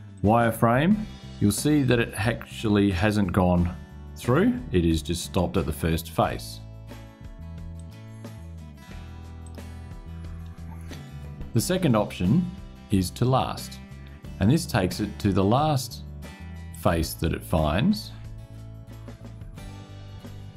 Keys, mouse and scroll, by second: 1.2 click, 7.5 click, 9.1 click, 14.2 click, 16.4 click, 18.7 scroll up 2, 19.2 scroll down 2, 19.9 shift+click.